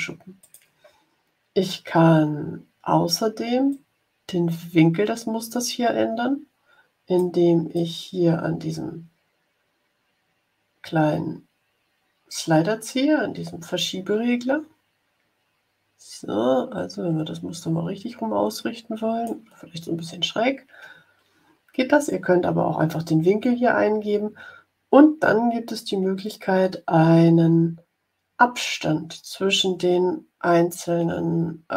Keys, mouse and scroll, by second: 0.4 click, 3.6-7.3 drag, 7.7-19.4 drag.